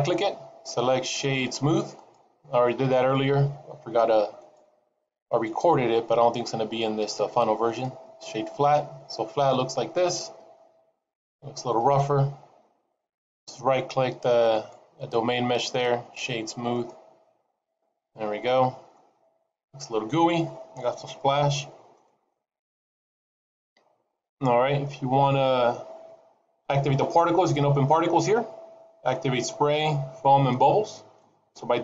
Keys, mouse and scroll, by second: 5.0 right click, 14.7 right click, 18.8 middle click, 19.8 middle click, 21.7 shift+middle click, 26.1-27.5 scroll down 5, 27.5-29.3 scroll down 1.